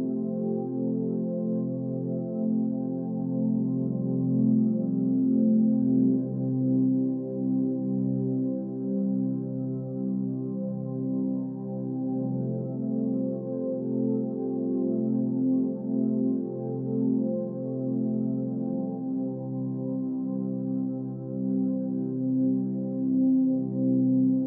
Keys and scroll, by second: 0.1 ctrl+c, 15.4 Right, 15.4 Up, 15.5 Right, 15.6 Up, 15.7 Right, 15.7 Up, 15.8 Right, 15.9 Up, 16.0 Right, 17.5 Up, 17.7 Right, 19.2 Up, 19.3 Left, 20.0 Down, 20.2 Left, 20.4 Up, 20.7 Left, 21.6 Up.